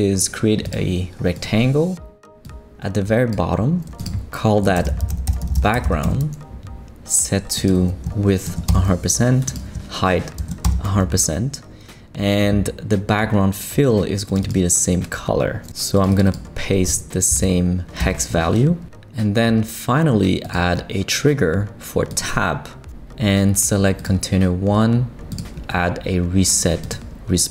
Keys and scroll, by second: 4.5-6.3 typing, 8.5 shift+5, 8.7 shift+Return, 9.6 Return, 10.4 shift+5, 10.6 shift+Return, 11.6 Return, 17.3 super+v, 18.0 super+Return.